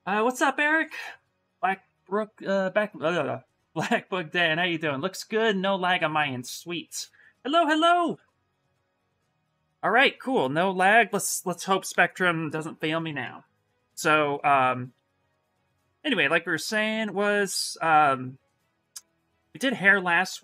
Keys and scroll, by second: 15.5 ctrl+n.